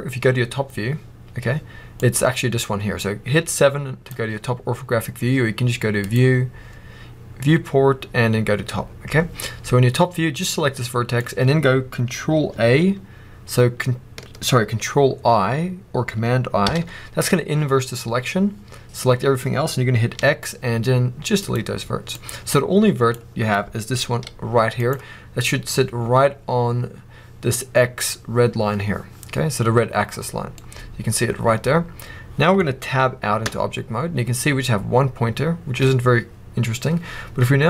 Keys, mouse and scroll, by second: 0.6 scroll down 1, 1.9 click, 5.9-10.4 drag, 9.4 scroll up 1, 16.6 ctrl+i, 20.0 x, 22.0 drag, 24.0 g, 24.8 right click, 30.3 scroll down 2, 30.5-37.6 middle drag, 33.4 Tab.